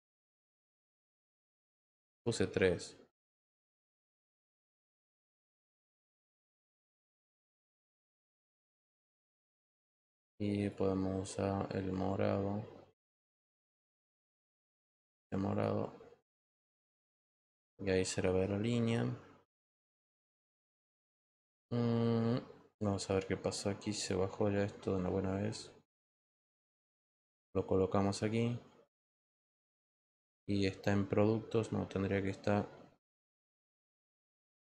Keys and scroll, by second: 2.5 3, 3.1 Return.